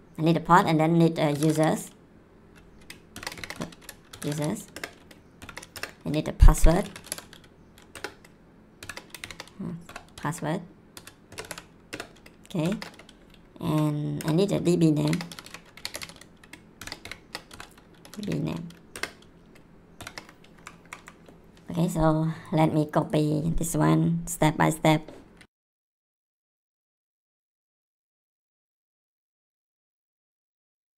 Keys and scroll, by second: 1.1-2.0 typing, 3.1-7.6 typing, 5.7 Return, 7.9 Return, 8.8-11.4 typing, 11.9 Return, 12.6 shift+., 14.2 Return, 14.9-18.7 typing, 18.9 Return, 19.9 shift+., 20.5 Up, 25.6 ctrl+c, 26.5 ctrl+v, 27.0 ctrl+c, 27.7 ctrl+v, 28.5 ctrl+c, 29.1 ctrl+v, 29.8 ctrl+c, 30.5 ctrl+v.